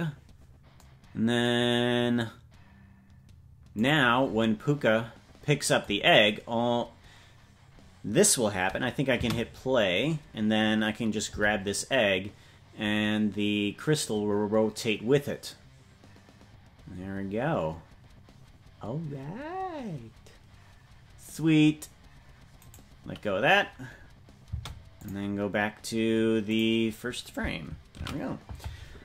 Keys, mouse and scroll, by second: 3.2 ctrl+s, 3.9 right click, 9.2 space, 11.4 g, 25.0-29.0 drag.